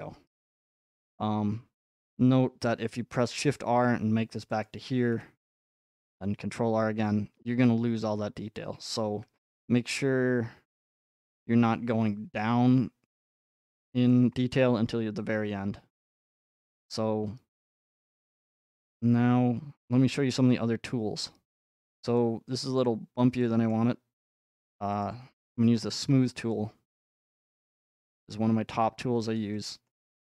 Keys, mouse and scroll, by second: 1.0 middle click, 3.1 r, 4.6-6.7 drag, 13.6-15.7 drag, 16.4-18.5 middle drag, 21.6-22.1 scroll, 22.8-23.4 scroll, 25.0 click, 26.3 scroll up 2, 27.1-28.1 middle drag, 28.1 click, 28.7 middle click, 29.4 click, 29.9-30.2 middle drag.